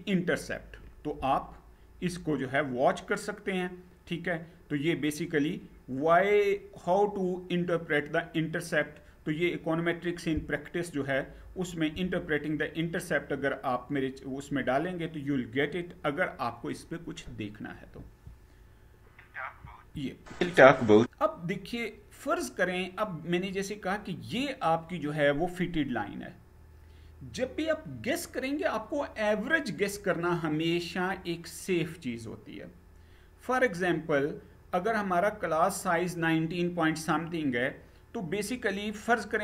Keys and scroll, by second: 17.6 Down, 19.3 Down.